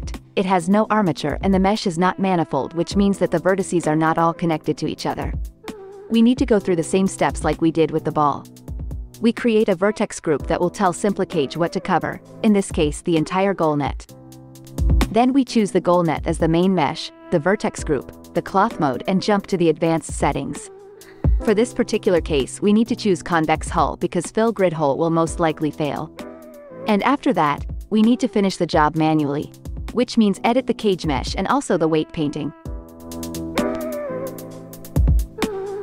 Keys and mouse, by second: 1.1-2.2 right drag, 2.9 Tab, 3.4 click, 5.6-7.3 middle drag, 7.3 Tab, 8.5 Tab, 8.5-11.5 middle drag, 8.8 a, 11.8-15.4 middle drag, 16.2 KP_Divide, 16.4 click, 17.9 middle click, 19.2 middle click, 21.0-22.4 middle drag, 26.4-31.0 middle drag, 28.7 KP_0, 30.0 Tab, 31.0-33.9 drag, 31.0-33.9 right drag, 32.6 space, 33.2 shift+Left, 34.2 click, 34.2 right click, 34.5-35.8 right drag.